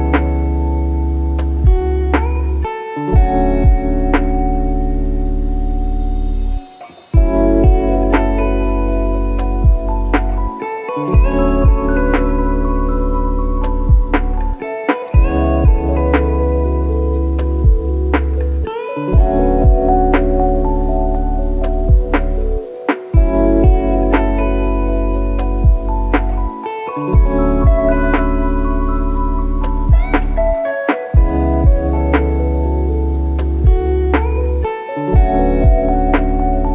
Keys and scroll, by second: 5.7 shift+BackSpace, 7.9 F1, 11.4 F1, 18.5 ctrl+d, 28.7-30.9 typing.